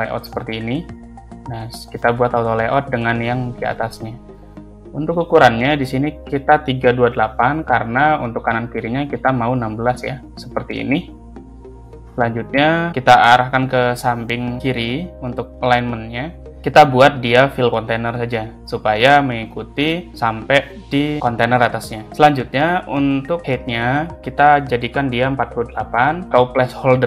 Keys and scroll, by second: 2.6 shift+a, 6.6 3, 7.6 Return, 25.0 4, 25.7 Return.